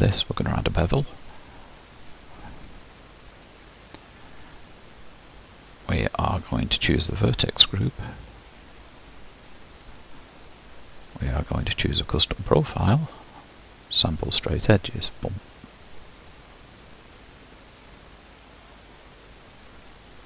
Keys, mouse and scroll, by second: 0.4 click, 2.5-7.2 drag, 9.0-12.1 drag, 14.2 click, 15.2-20.2 drag.